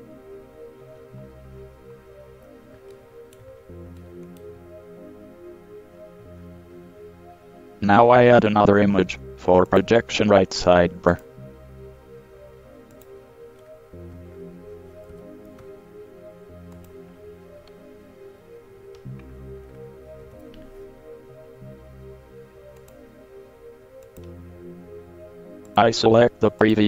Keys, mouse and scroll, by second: 0.2-1.7 middle drag, 3.0-3.3 middle drag, 3.4-4.6 middle drag, 5.9 middle click, 6.6-9.8 middle drag, 9.8-15.3 drag, 15.3 ctrl+c, 17.0-19.6 drag, 20.4 KP_3, 23.0-24.6 drag.